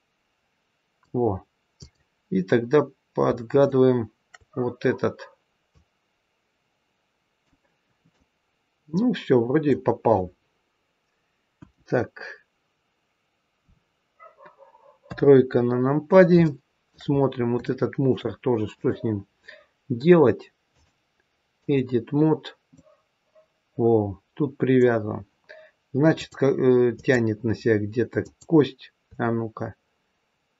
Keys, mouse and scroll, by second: 1.7 click, 3.5 shift+click, 3.9 shift+click, 5.7 click, 8.0 middle click, 11.5 KP_1, 13.6-14.4 scroll up 2, 14.4-15.0 scroll up 2, 15.0 KP_3, 15.9-16.4 scroll down 2, 16.4 shift+middle click, 17.2-17.6 scroll up 2, 17.5 shift+middle click, 18.7 click, 20.6 click, 22.7 middle click, 25.0-25.7 scroll down 2, 26.1 click, 28.2 click.